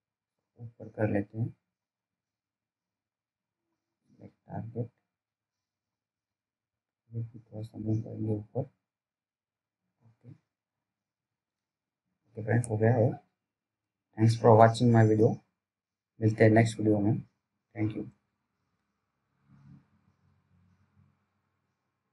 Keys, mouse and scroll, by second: 2.3 click, 7.0 s, 7.7 click, 7.7 click, 17.0 click, 19.0 t.